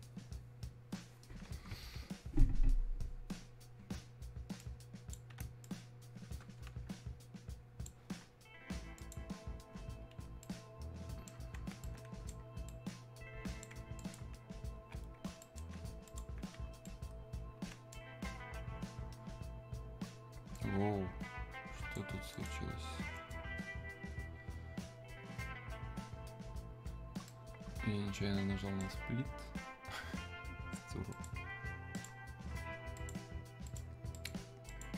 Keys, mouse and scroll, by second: 2.8 click, 4.6-9.0 ctrl+drag, 9.0 click, 10.4-14.0 right drag, 14.0 ctrl+click, 15.4 right click, 16.1 alt+click, 16.9-20.4 right drag, 20.5-22.3 drag, 27.3-31.1 right drag, 31.1 click.